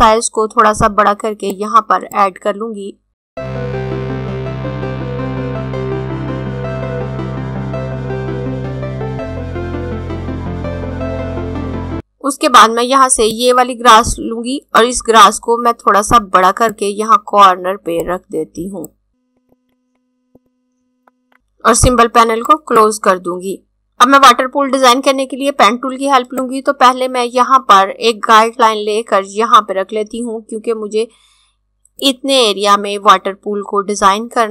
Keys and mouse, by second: 3.1 z, 4.0 ctrl+d, 4.2 typing, 4.7 click, 6.7 click, 8.0 click, 9.7 click, 11.3 right click, 11.5 click, 13.5 click, 21.3 click, 22.5 click, 26.3 click.